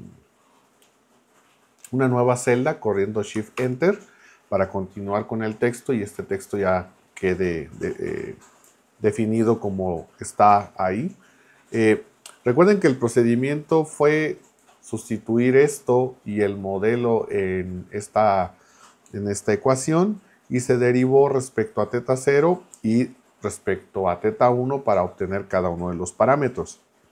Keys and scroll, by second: 3.6 shift+Return.